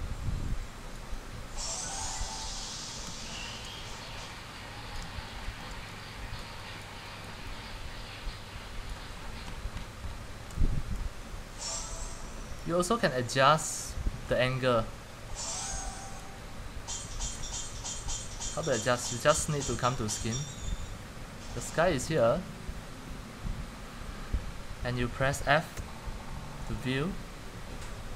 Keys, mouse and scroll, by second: 0.0 middle click, 0.4 scroll, 0.5-3.5 typing, 1.1 click, 2.6 click, 2.7-3.3 scroll, 5.2 click, 5.4 scroll, 5.5 typing, 6.7-7.7 typing, 8.9 drag, 9.0 c, 9.1 c, 9.3 middle click, 11.1-12.1 typing, 14.4-15.2 c, 16.3-17.0 typing, 17.5-26.0 drag, 26.0 typing, 27.5 typing.